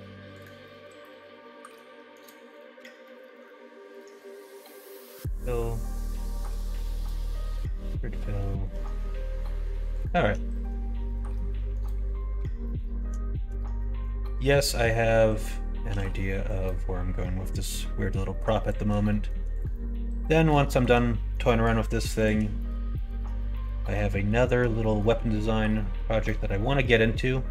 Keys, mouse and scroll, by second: 0.8 middle click, 2.8 ctrl+f, 5.0 middle click, 5.8 alt+click, 6.2 middle click, 6.9 ctrl+f, 7.8 middle click, 8.4 middle click, 8.9 middle click, 10.5 middle click, 11.0 alt+shift+click, 11.3 middle click, 12.6 middle click, 13.2 shift+middle click, 13.8 middle click, 14.6 middle click, 15.8 b, 19.0 middle click, 19.7 middle click, 20.3 middle click, 20.6 shift+middle click, 21.2 middle click, 22.1 shift+click, 22.5 middle click, 22.9 shift+middle click, 23.5 middle click, 24.1 shift+middle click, 24.7 middle click, 25.7 middle click, 26.4 middle click.